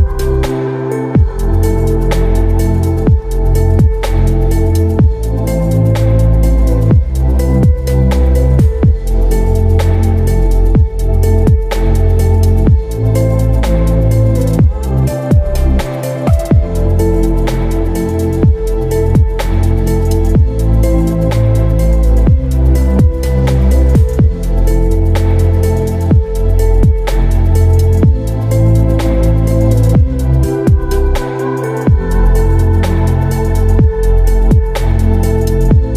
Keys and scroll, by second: 7.6 ctrl+j, 13.7 Delete, 15.0 ctrl+d, 21.0 ctrl+t, 30.5 Return.